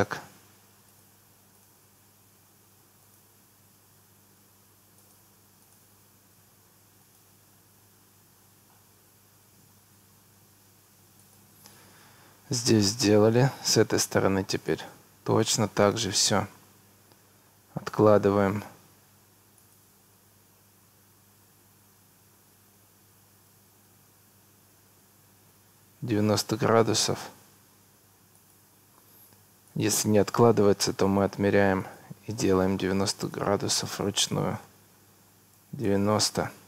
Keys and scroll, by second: 3.6 Escape, 11.8 Escape, 29.0 Escape, 35.3 9, 35.9 Return.